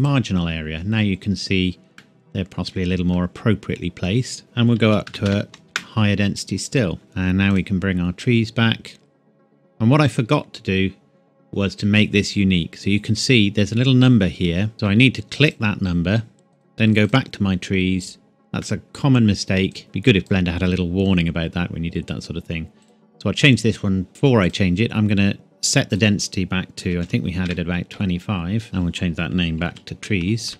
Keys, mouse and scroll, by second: 2.0 middle click, 4.4 click, 4.8 KP_3, 5.0 KP_0, 5.6 KP_Enter, 7.0 KP_0, 7.4 click, 15.4 click, 18.6 middle click, 19.7 click, 21.7-22.8 scroll up 1, 22.8 click, 24.4 click, 26.8 KP_2, 27.0 KP_5, 27.4 KP_Enter, 28.6 click, 29.6 shift+y, 30.5 BackSpace.